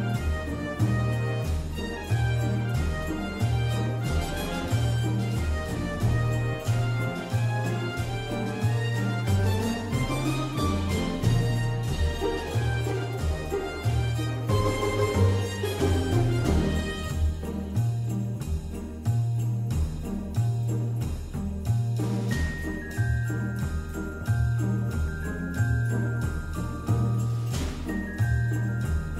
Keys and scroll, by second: 0.6 ctrl+shift+g, 12.2 ctrl+shift+[, 23.6 ctrl+z, 24.9 ctrl+z.